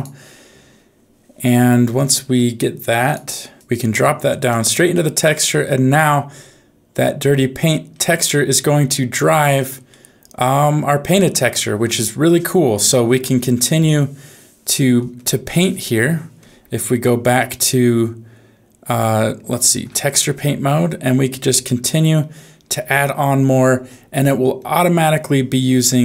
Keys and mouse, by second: 3.6 click, 8.5 middle click, 9.8-11.5 middle drag, 17.3 ctrl+Tab, 20.4 click, 20.8 click, 21.4 click, 21.8 click, 22.1 click, 22.7 click, 23.1 click, 23.5 click, 24.3 click, 24.6 click, 24.9 click, 25.3 click, 25.7 click.